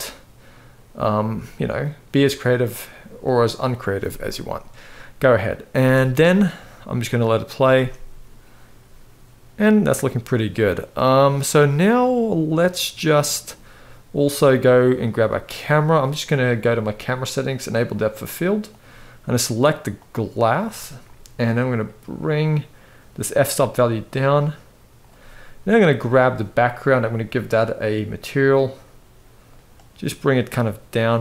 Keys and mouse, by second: 5.5 space, 7.5 space, 14.7 click, 17.5 click, 18.4 click, 21.3-23.1 drag, 23.8 click, 25.4 click, 26.7 click.